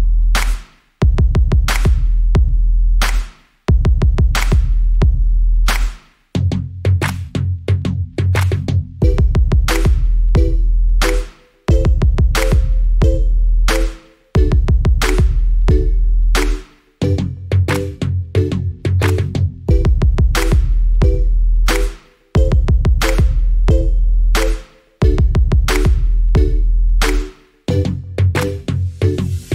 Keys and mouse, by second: 0.0 shift+drag, 0.5-1.5 shift+drag, 1.7 shift+click, 2.1 KP_3, 2.7 KP_1, 3.3 ctrl+z, 3.6-4.6 drag.